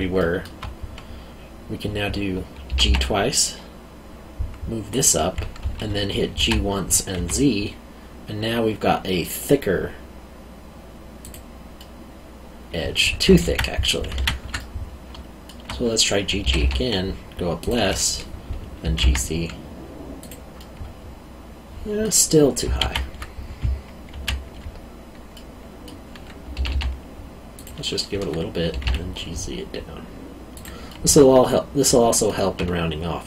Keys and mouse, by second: 0.2 alt+middle click, 2.7 g, 4.9 click, 6.4 g, 7.1 z, 11.2 click, 11.8 middle click, 13.4 ctrl+z, 14.5 middle click, 16.4 g, 17.6 click, 18.8 g, 19.0 z, 20.2 click, 20.6 middle click, 22.8 ctrl+z, 24.1 ctrl+z, 25.3 middle click, 26.5 g, 27.5 click, 28.7 g, 28.8 z, 30.5 click, 30.8 middle click.